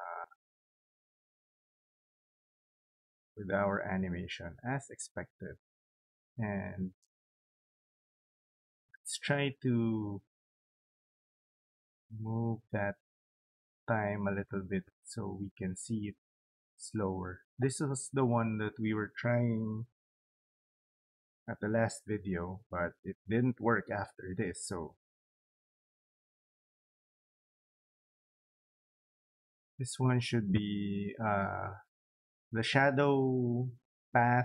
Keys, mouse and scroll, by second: 0.1 click, 3.6 click, 3.7 click, 7.0 right click, 11.0 click, 16.2 click, 18.1 click, 19.9-20.8 typing, 25.8 click, 28.1 click.